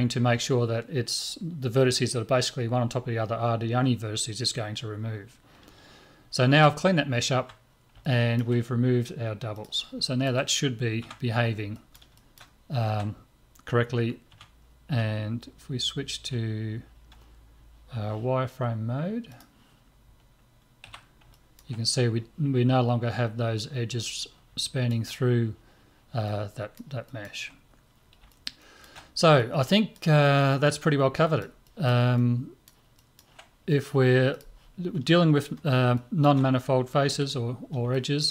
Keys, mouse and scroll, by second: 7.4 Tab, 8.0-9.6 middle drag, 9.6-11.8 drag, 11.0 Tab, 11.8-16.2 middle drag, 14.3 Tab, 16.2 z, 19.3-21.3 drag, 20.9 z, 21.3-23.1 middle drag, 24.6-34.4 middle drag, 34.4-37.1 drag, 34.5 middle click, 35.9-38.3 middle drag, 37.1 z.